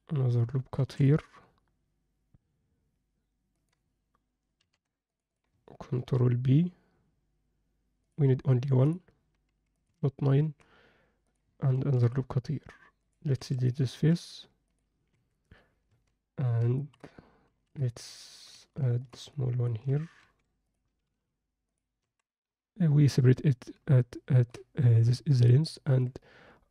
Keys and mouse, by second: 0.8 ctrl+r, 4.6 ctrl+r, 6.0 ctrl+b, 8.8 drag, 9.7 click, 11.3 click, 11.8 ctrl+r, 13.4 3, 13.6 click, 13.9 x, 15.1 Tab, 15.9 Tab, 16.8 ctrl+alt+middle click, 17.4 ctrl+r, 19.3 ctrl+alt+middle click, 20.2 3, 21.1 x, 22.0 Tab, 24.0 ctrl+alt+middle drag, 25.8 Tab.